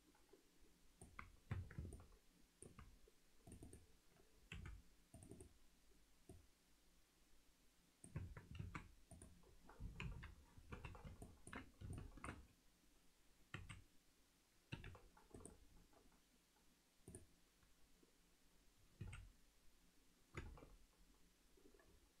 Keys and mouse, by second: 1.5 Tab, 1.9 alt+middle click, 3.6 click, 5.3-8.0 drag, 5.3 3, 8.2 Tab, 8.7 alt+a, 9.2 click, 10.0 KP_3, 10.7 z, 11.2 ctrl+alt+middle click, 12.0 alt+shift+middle click, 13.5 s, 16.6 right click, 19.0 s.